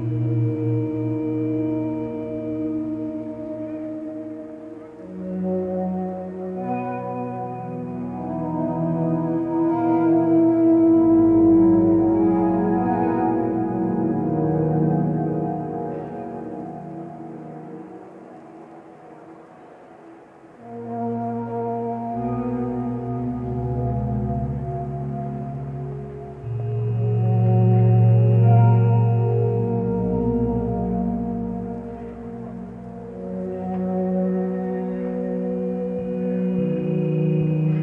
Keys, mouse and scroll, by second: 1.1 x, 4.2 ctrl+space, 4.9 click.